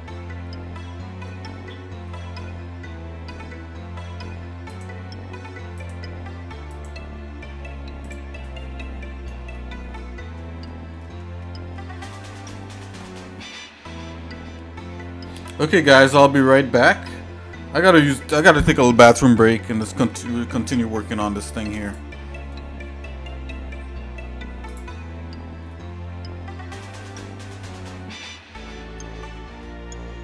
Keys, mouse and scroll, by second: 4.8-6.1 drag, 6.7 click, 8.1 click, 9.6 shift+middle click, 10.6 scroll down 1, 11.0 middle click, 11.4 shift+middle click, 12.0 shift+middle click, 21.1 shift+middle click, 21.9 click, 24.7 click, 25.6 scroll down 2, 25.7 scroll down 1, 26.0 scroll down 1, 26.9-28.2 shift+middle drag, 28.4-28.7 scroll down 2, 29.0 middle click.